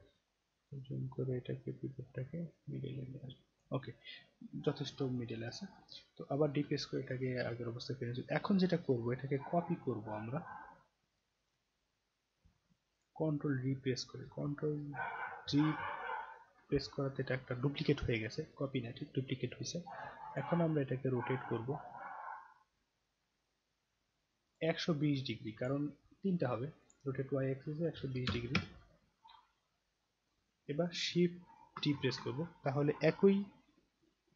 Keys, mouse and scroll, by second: 0.7-3.6 drag, 4.1 scroll down 1, 4.8-5.5 scroll down 2, 5.5 scroll up 6, 5.7 scroll down 2, 6.6 d, 7.6-8.1 scroll down 2, 12.9 click, 15.4 ctrl+d, 20.3 click, 21.7-24.5 drag, 25.5 click, 26.8 click, 30.2 click, 31.8 shift+d.